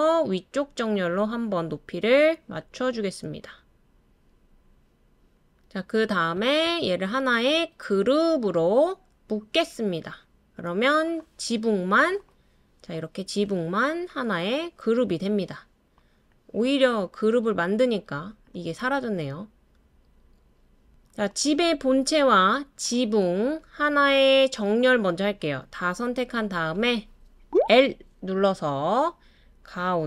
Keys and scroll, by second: 27.5 l, 28.3 l.